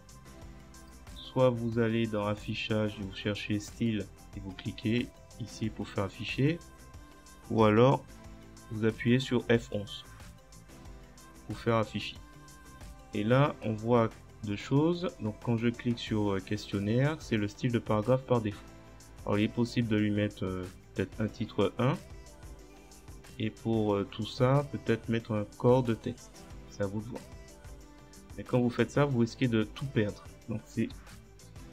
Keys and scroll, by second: 7.8 F11, 31.5 ctrl+z.